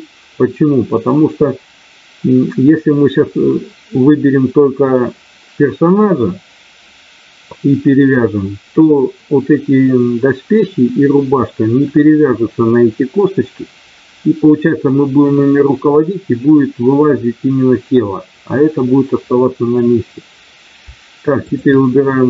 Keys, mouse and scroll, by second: 21.4 shift+click.